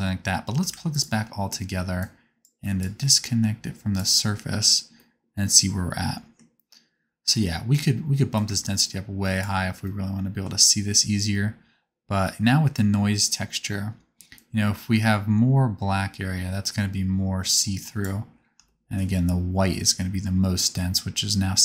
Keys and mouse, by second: 1.1 ctrl+shift+click, 10.7 middle click.